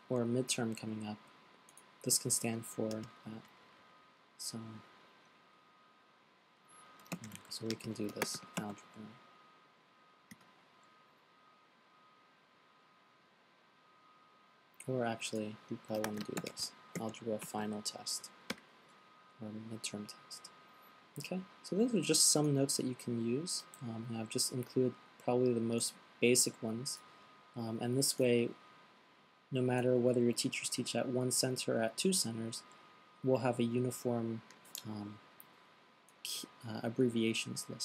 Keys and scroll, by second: 0.0-0.1 typing, 7.3-9.3 typing, 11.6-12.3 typing, 16.2-17.8 typing, 21.6 typing, 24.0 fn+Delete.